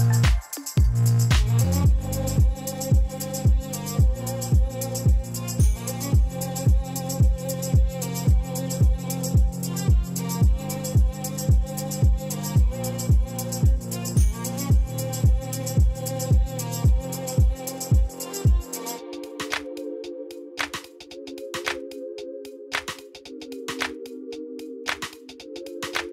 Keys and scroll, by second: 3.3 a, 3.6 Return, 7.1 shift+a, 7.5 m, 7.5 i, 7.6 x, 8.9 shift+a, 14.8 6, 15.4 5, 16.5 e, 16.8 Return, 18.1 6, 18.5 1, 19.5 Return.